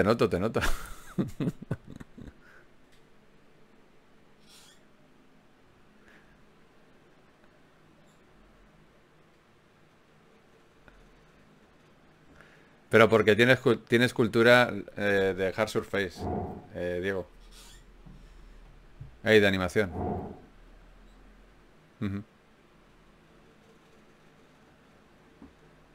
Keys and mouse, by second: 0.7-3.4 drag, 1.1 g, 2.4 g, 3.4 g, 4.4 ctrl+Tab, 5.2 click, 6.4 f, 6.6 f, 7.6 click, 7.8 f, 9.2 ctrl+Tab, 11.0 click, 11.0 right click, 11.8-14.6 drag, 11.8 right click, 13.4 right click, 14.0 f, 14.6 ctrl+Tab, 16.8 f, 17.6 f, 22.0-23.2 right drag.